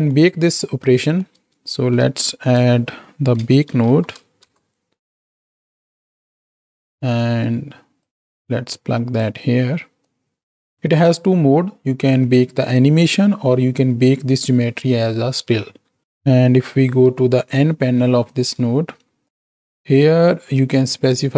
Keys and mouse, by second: 0.6 middle click, 2.0 shift+a, 7.2 click, 8.3-10.8 drag, 16.9 n, 19.3 click, 20.7 click.